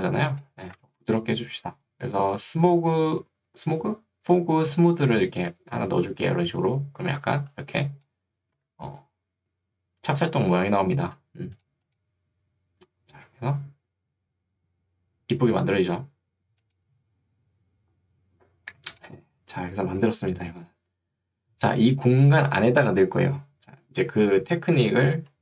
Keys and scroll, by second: 0.9 Escape, 7.3 ctrl+2, 8.7 Escape.